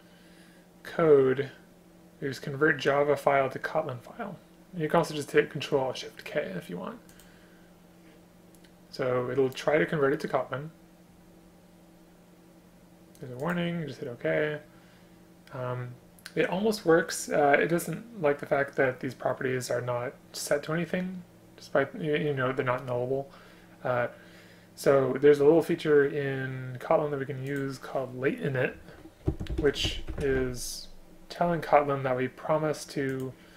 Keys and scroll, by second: 29.3 space.